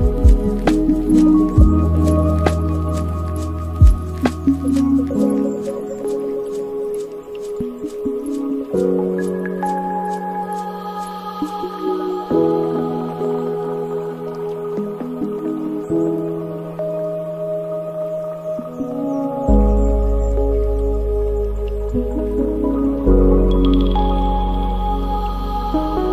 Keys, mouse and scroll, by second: 0.3-3.3 drag, 4.5 click, 4.9 space, 5.5-7.7 drag, 7.7 space, 8.9 space, 10.0-10.4 scroll down 3, 10.4-11.7 middle drag, 11.7 scroll down 2, 12.0-14.1 middle drag, 14.1-14.7 scroll down 10, 14.8 middle click, 15.5 scroll down 4, 15.9 middle click, 16.7 scroll up 3, 17.0-18.3 middle drag, 18.3 click, 19.9 scroll up 2, 20.1 scroll down 1, 20.1-20.9 scroll up 1, 20.9-22.7 middle drag, 22.7 shift+a, 25.6-26.1 middle drag.